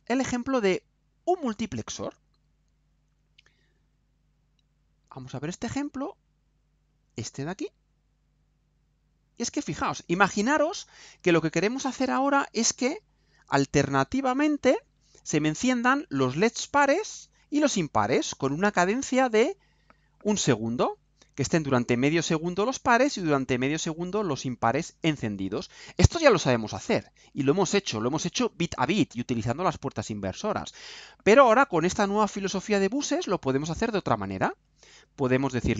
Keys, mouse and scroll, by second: 0.4 scroll down 2, 2.0 click, 8.0 click, 9.5-11.2 right drag, 12.1 click, 13.3-14.6 right drag, 14.8 scroll down 2, 15.2 right click.